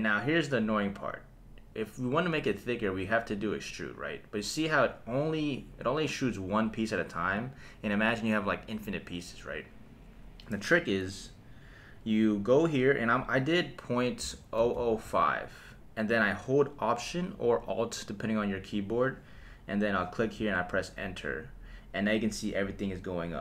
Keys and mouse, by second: 3.3-7.3 drag, 12.5-14.7 drag, 14.7 KP_0.